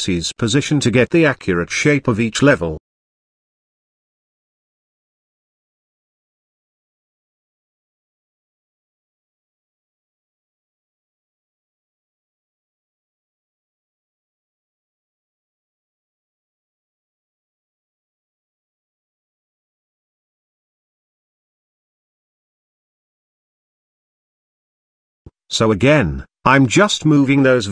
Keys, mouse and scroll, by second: 1.0 g, 3.6 ctrl+click, 4.5 ctrl+click, 5.9 ctrl+click, 6.9 g, 11.5 click, 11.7 alt+click, 12.9 g, 15.7 ctrl+click, 16.5 ctrl+click, 17.3 g, 21.0 click, 21.5 alt+click, 22.0 scroll up 1, 22.0 middle click, 22.9 click, 23.6 alt+click, 24.4 alt+shift+click, 25.2 KP_7, 26.3 g.